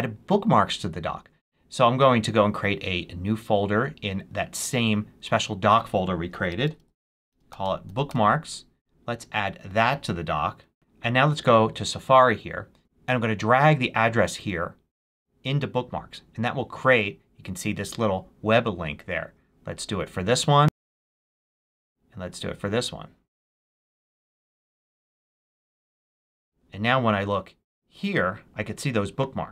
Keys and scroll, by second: 6.1-8.3 typing.